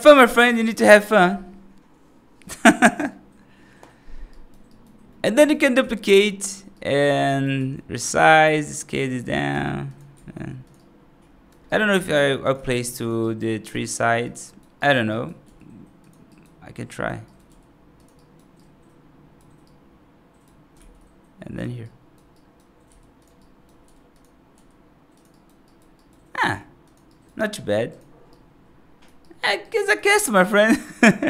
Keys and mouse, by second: 0.4 right drag, 4.2 right drag, 4.6 right drag, 4.9 middle drag, 5.2 right click, 5.7 shift+d, 6.6 right drag, 7.2 right drag, 7.4 s, 8.1 g, 8.7-9.0 right drag, 9.4 g, 10.0 s, 10.6-11.4 right drag, 11.5 right drag, 11.8 s, 12.4 g, 13.1 right drag, 13.6 g, 14.3 right click, 14.7 right click, 15.0 right click, 15.3 g, 16.1 right drag, 16.7 right click, 17.1 right click, 17.3 g, 18.0 right drag, 18.4-19.2 right drag, 19.5-20.3 right drag, 20.6 shift+d, 21.7-22.0 right drag, 22.2 right drag, 22.7 g, 23.2 right drag, 23.7 g, 24.4 g, 25.2 right drag, 25.5 right drag, 25.8 right drag, 26.3 g, 27.0 right drag, 28.2-28.9 right drag, 29.1 right drag, 29.5 right click, 29.7 right drag, 30.0 right drag.